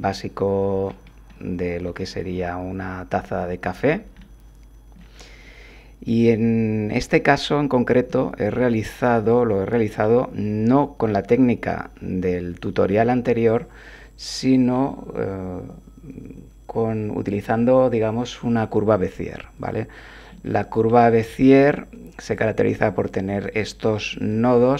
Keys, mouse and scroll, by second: 1.3 click, 4.2 click, 8.1 Tab, 9.2 click, 9.9-11.2 drag, 11.7-14.9 drag, 17.2 click, 20.3-21.4 drag, 22.3 click, 22.9 click, 24.2 click.